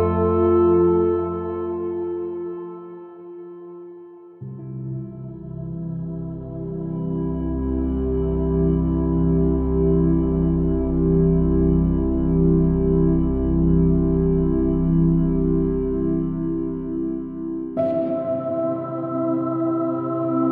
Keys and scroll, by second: 2.4 space, 2.8 space, 3.4 space, 3.6 x, 9.2 space, 11.8 space, 14.0 super+z, 14.8 x, 16.4 super+-.